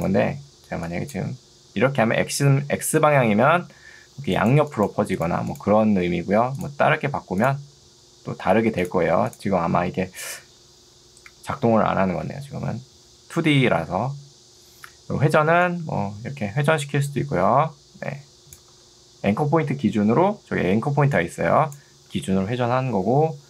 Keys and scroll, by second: 4.3 ctrl+2, 6.1 Escape, 18.7 ctrl+z, 20.3 ctrl+2, 22.1 Escape.